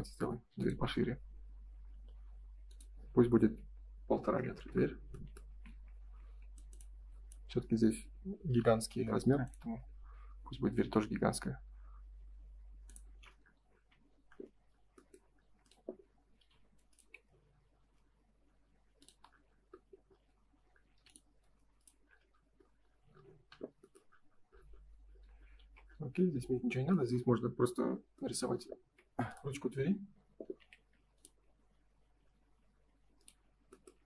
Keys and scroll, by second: 4.6 Return, 5.4 space, 5.6 Escape, 13.3 space, 13.5 Escape, 14.5 ctrl+s, 19.1 space, 21.9 space, 25.5 ctrl+s, 28.7 ctrl+s, 33.5 space.